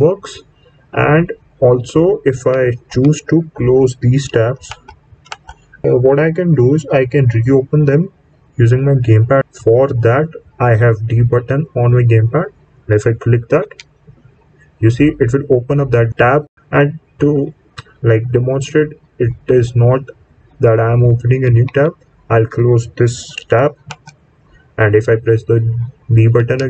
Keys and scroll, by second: 2.2 Right, 2.8 Right, 13.5 b, 21.6 Left, 26.3 b.